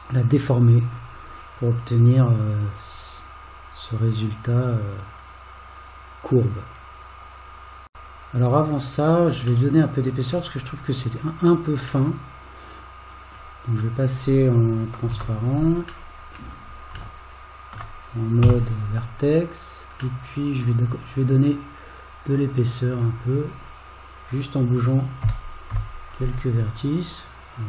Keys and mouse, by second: 9.7 middle click, 12.1-13.4 middle drag, 15.2 alt+z, 16.1 middle click, 17.2 shift+middle click, 18.4 1, 20.2 middle click, 22.6 click, 25.2 g.